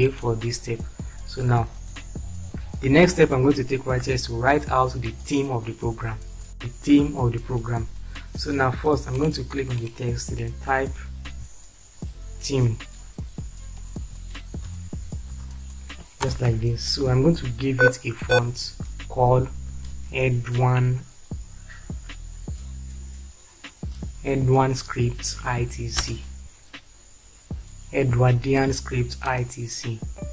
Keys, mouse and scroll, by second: 11.2 t, 13.8 Caps_Lock, 14.2-15.6 typing, 16.4 ctrl+space, 19.7 e, 23.1 d, 25.9 Return.